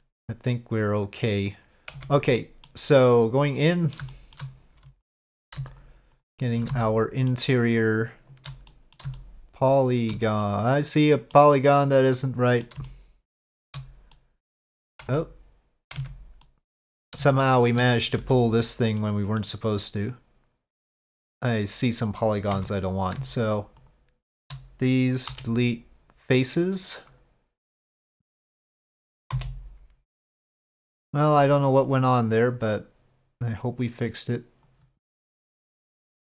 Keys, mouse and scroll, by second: 2.1 Tab, 2.4 middle click, 4.1 shift+click, 5.0 alt+click, 6.8 shift+middle click, 7.7 shift+click, 8.7 middle click, 9.1-10.1 shift+middle drag, 10.4 middle click, 11.5 middle click, 12.1 middle click, 12.8 shift+middle click, 14.1 middle click, 15.2 Tab, 16.0 Tab, 16.4 middle click, 16.7 click, 17.3 shift+click, 18.2 1, 18.5 click, 19.0 click, 20.7 click, 22.5 3, 22.7 click, 23.8 shift+click, 25.3 Delete, 27.4 Delete, 27.6 1, 27.9 shift+click, 28.4 shift+click, 29.3 f, 30.5 click, 31.9-35.6 drag, 35.9 click.